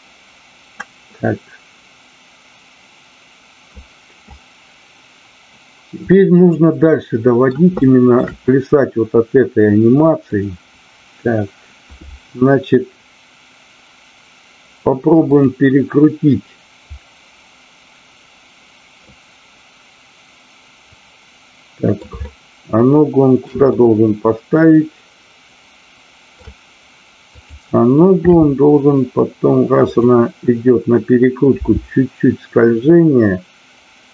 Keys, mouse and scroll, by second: 6.1-7.5 middle drag, 7.8 shift+middle click, 10.2 click, 15.1 click, 19.0-22.1 middle drag, 22.2-23.5 shift+middle drag, 23.7-26.3 middle drag, 27.2-28.1 drag, 28.3 r, 29.9 click.